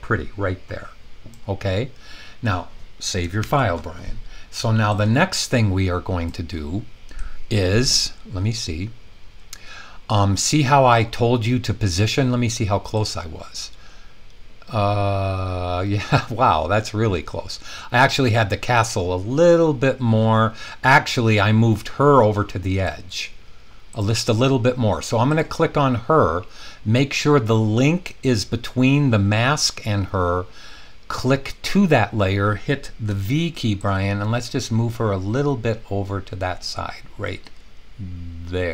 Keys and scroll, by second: 3.4 super+s, 33.0 v.